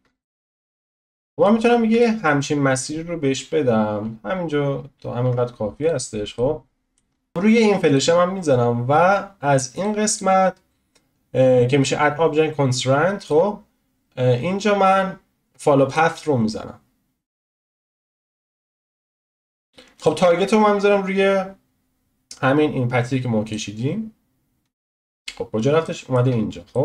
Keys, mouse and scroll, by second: 0.8-1.1 scroll down 1, 1.1 shift+middle click, 1.6-2.0 scroll down 1, 2.0-3.3 shift+middle drag, 3.3-4.3 scroll down 1, 4.3-5.2 scroll up 1, 5.2 Tab, 5.9 click, 6.3-7.1 middle drag, 7.1 scroll up 1, 7.3 click, 7.9 click, 15.9-24.5 drag, 24.5-25.8 scroll down 6, 25.8-26.4 shift+middle drag, 26.4-26.7 scroll up 1, 26.7-26.8 shift+middle drag.